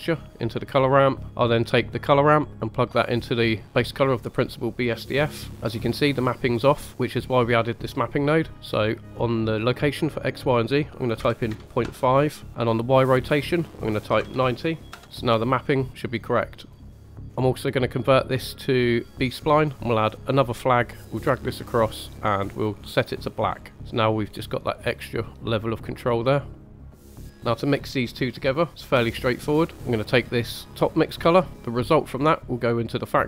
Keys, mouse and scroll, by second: 1.2 ctrl+right click, 2.5-2.8 drag, 5.5 scroll up 1, 5.6-6.5 drag, 6.9-8.5 middle drag, 9.1 scroll up 1, 9.9-11.8 drag, 13.1-14.9 drag, 15.5-17.2 drag, 17.2 scroll up 2, 17.9-19.4 drag, 20.2 click, 21.0-21.6 drag, 22.1 click, 22.9 click, 24.2-25.3 drag, 25.7-26.5 drag, 26.5 click, 26.9 scroll down 2, 27.0 middle click, 27.3 middle click, 30.5 middle click, 31.5-33.2 drag.